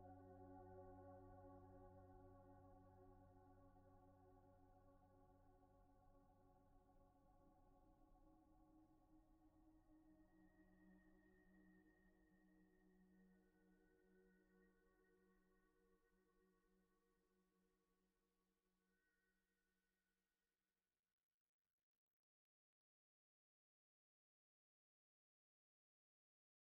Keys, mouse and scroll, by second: 0.2 ctrl+scroll down 1, 2.4-2.8 scroll up 1, 3.6 g, 4.7 shift+middle click, 5.6 g, 13.4 typing, 19.3 typing, 21.6-23.1 scroll down 1, 24.3-26.6 typing.